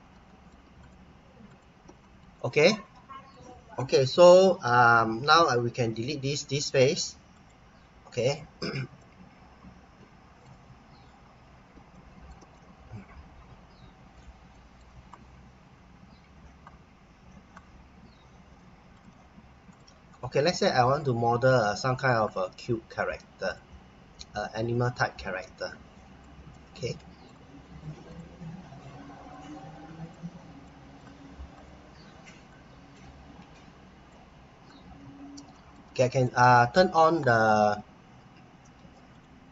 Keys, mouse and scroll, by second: 0.2 middle click, 0.8 click, 1.5 click, 2.0 middle click, 5.8 Delete, 7.3 click, 8.0-9.0 scroll up 1, 9.0 middle click, 10.8-11.7 scroll up 1, 11.9 middle click, 12.5 middle click, 15.6-17.7 scroll down 1, 18.9 click, 20.2 middle click, 21.7-23.0 scroll up 1, 23.4 click, 26.5 middle click, 28.0 click, 30.6 middle click, 31.5 click, 34.6-35.0 scroll down 1, 35.0-35.4 scroll up 1, 35.5 middle click, 39.1 click.